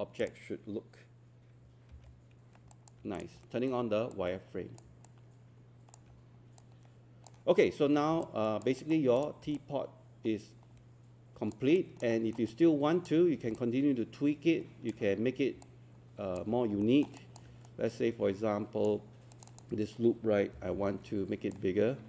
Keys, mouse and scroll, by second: 1.9 alt+5, 2.7 alt+click, 3.4 alt+middle click, 4.2 click, 5.1 alt+click, 6.6 click, 7.6-8.0 scroll down 1, 8.0 scroll up 1, 8.2 alt+click, 9.2 click, 9.6-11.5 alt+drag, 11.8 alt+click, 12.2 alt+middle click, 12.5 alt+click, 13.6 alt+click, 15.6 alt+click, 16.5 scroll up 1, 16.8 alt+middle click, 17.2 alt+click, 17.7-19.3 right drag, 19.3 click, 20.6 e, 21.5-22.0 drag.